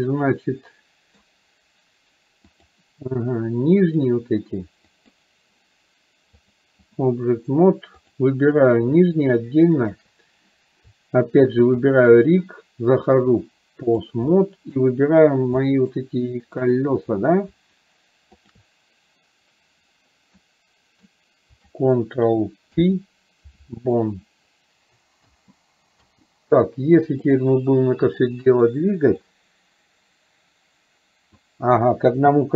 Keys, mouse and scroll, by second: 2.6 click, 5.1 click, 6.4 click, 9.8 shift+click, 11.9 shift+click, 13.3 click, 14.4-14.9 middle drag, 15.7 middle click, 16.7 click, 18.4 shift+click, 20.6 middle click, 27.4 click, 29.4-31.6 drag.